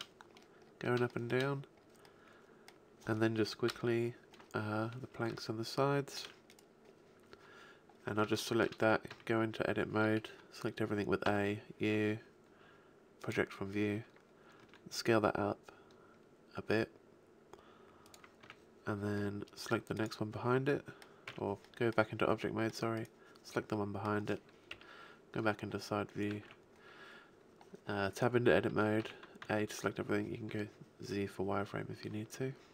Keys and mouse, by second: 3.7 KP_3, 8.8 Tab, 9.1 a, 11.2 u, 14.6 s, 18.2-19.9 drag, 18.4 a, 19.9-21.6 right drag, 21.3 Tab, 24.8 KP_3, 26.4 Tab, 29.0 a, 29.4 z.